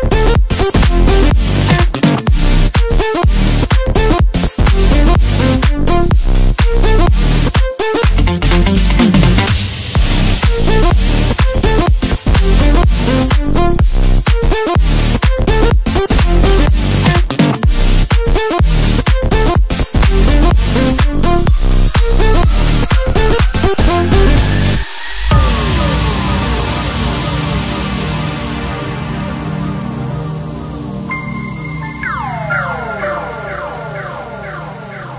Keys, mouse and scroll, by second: 4.3 g, 7.7 ctrl+KP_2, 7.9 ctrl+KP_2, 8.1 ctrl+KP_2, 8.3 ctrl+KP_2, 8.9 ctrl+KP_6, 9.2 ctrl+KP_6, 9.3 ctrl+KP_6, 9.5 ctrl+KP_6, 9.8 ctrl+KP_6, 11.2 shift+b, 14.9 s, 18.9-19.5 scroll down 4, 19.5-20.1 scroll up 1, 20.1-21.3 scroll down 6, 21.8 g, 25.5 g, 28.8 s, 31.5 shift+b, 34.8-35.1 middle drag.